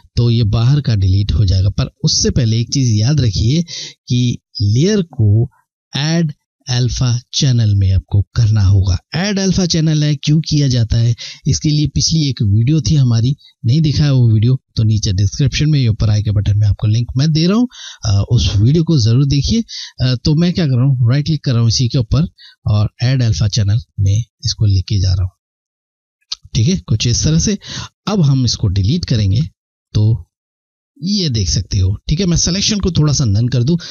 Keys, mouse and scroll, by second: 20.3 right click, 23.2 click, 28.9 Delete, 33.4 click.